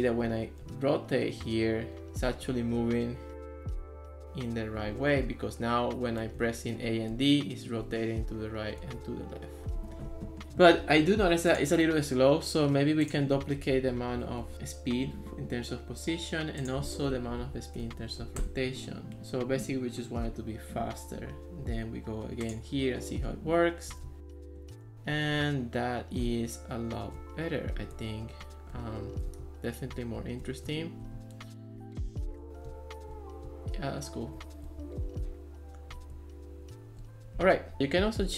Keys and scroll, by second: 0.0-0.7 typing, 2.8 d, 5.3 a, 6.4 d, 7.9 a, 9.0 d, 13.8 Left, 14.0 Right, 14.4 BackSpace, 14.6 Return, 17.2 Left, 17.4 Right, 17.8 BackSpace, 17.9 2, 18.4 Return, 23.7-27.3 typing, 29.5 d, 30.7 a, 31.2 d, 32.1 a, 32.7 d, 34.4 a, 35.2 d, 36.2 a.